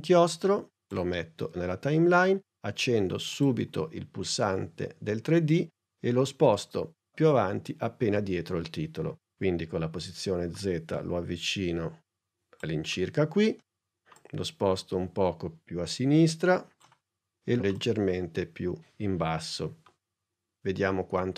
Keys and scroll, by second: 9.4 p.